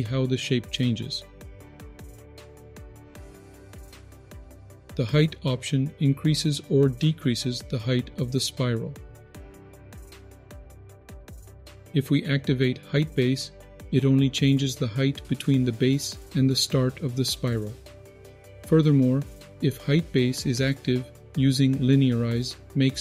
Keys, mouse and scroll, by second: 3.5-3.9 scroll down 3, 4.0 shift+middle click, 4.2 middle click, 6.0-11.1 drag, 11.2 click, 12.7 click, 14.8-18.4 drag, 19.9-23.0 drag.